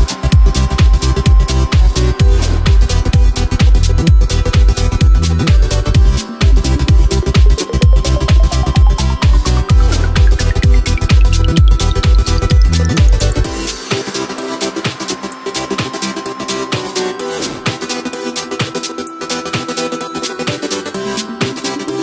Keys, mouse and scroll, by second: 0.5 alt+g, 1.1-1.7 shift+middle drag, 1.7-2.9 scroll up 2, 2.9-6.8 drag, 6.8-8.2 middle drag, 8.2-8.8 scroll up 3, 8.8-10.1 scroll down 1, 10.1 ctrl+a, 11.1 g, 12.6 scroll down 1, 12.9-14.2 middle drag, 14.2-14.6 scroll up 4, 14.6-17.5 middle drag, 17.5 s, 19.1-20.1 middle drag, 20.1 s.